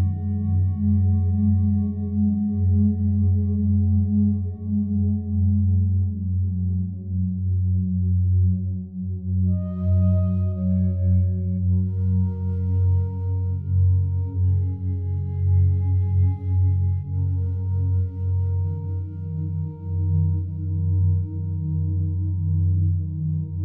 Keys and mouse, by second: 0.1 click, 0.8 click, 2.2 typing, 3.2 click, 4.7 click, 4.9 click, 6.0 click, 6.8 typing, 9.4 Escape, 9.4 typing, 11.4-12.8 drag, 12.9-14.7 drag, 14.7 g, 15.0 z, 16.2 click, 17.1 click, 17.6 click, 18.4 click, 19.1 g, 20.1 Escape, 20.5 click, 21.4 typing, 23.1 typing.